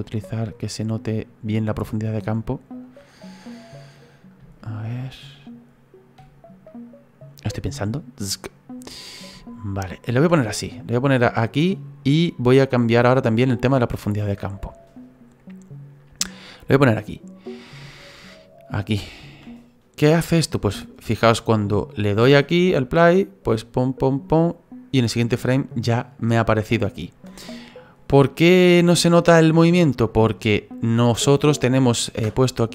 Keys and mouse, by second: 0.0 middle click, 2.3 middle click, 4.6 shift+middle click, 6.7 middle click, 7.4 middle click, 9.4 shift+middle click, 10.5 middle click, 12.0 middle click, 17.9 shift+middle click, 21.3 click, 22.2 space, 27.3 space, 30.1 click.